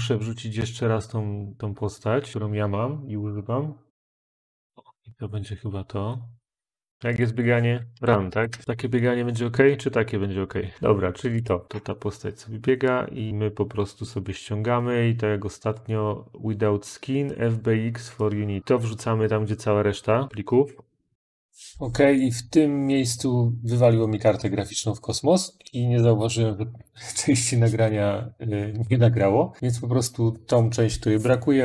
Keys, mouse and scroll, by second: 1.4 click, 1.8 click, 3.9 scroll, 4.5 click, 6.5 click, 7.0-8.5 typing, 7.0 click, 11.3 click, 11.6 scroll, 14.0 click, 15.6 click, 16.7 click, 17.2 click, 21.5 click.